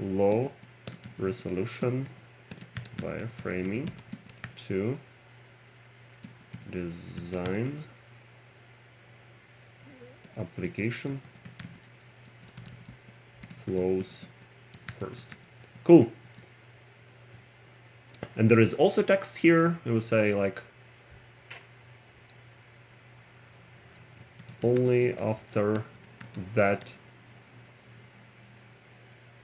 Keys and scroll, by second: 0.4 r, 3.3-5.0 typing, 6.3 g, 7.7 n, 12.9 w, 14.0-16.3 typing, 24.3-27.4 typing.